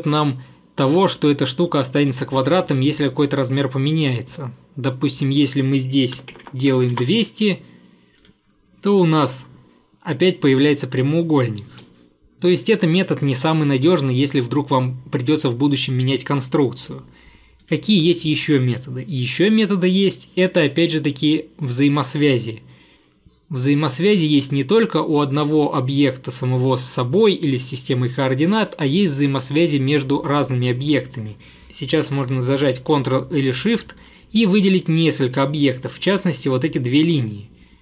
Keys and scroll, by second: 5.9-6.9 typing, 7.0 Return, 11.5-12.4 typing, 18.0 Delete.